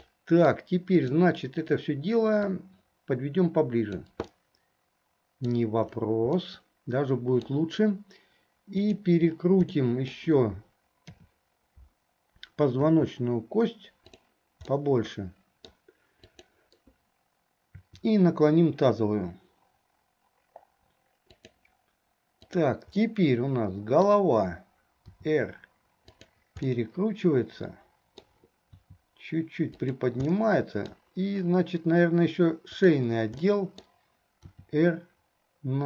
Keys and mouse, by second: 0.3 middle click, 1.2 click, 2.5-4.4 drag, 4.6-5.7 middle drag, 6.6-7.7 middle drag, 8.9 click, 9.9 middle click, 11.4 KP_7, 12.8 r, 14.9-16.0 middle drag, 16.5 click, 17.9 r, 22.6 click, 23.2-24.3 middle drag, 25.3 r, 26.9-28.6 middle drag, 30.5 middle click, 33.5 middle click, 34.7 r.